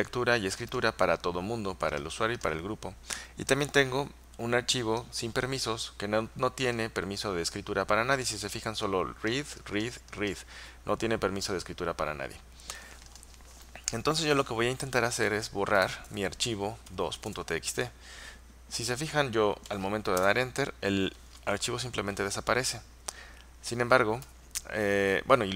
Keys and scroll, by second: 14.8-17.3 typing, 20.3 Return, 24.3 typing.